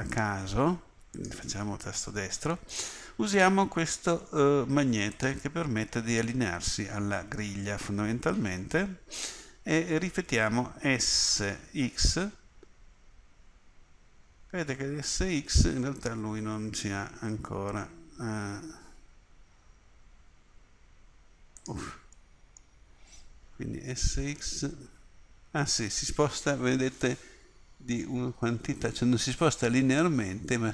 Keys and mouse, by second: 5.2-11.5 drag, 11.5 s, 22.2 middle click, 23.8 s.